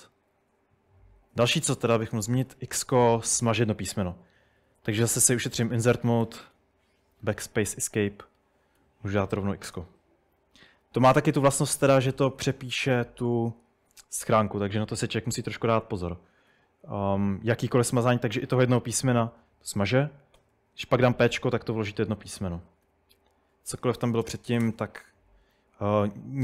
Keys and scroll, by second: 0.0-0.4 typing, 2.8-5.3 typing, 7.6 Escape, 8.8-10.0 typing, 11.2-11.7 h, 12.1 h, 12.4 j, 15.5-17.0 typing, 18.3 typing, 19.8-20.4 typing, 22.8-24.6 typing.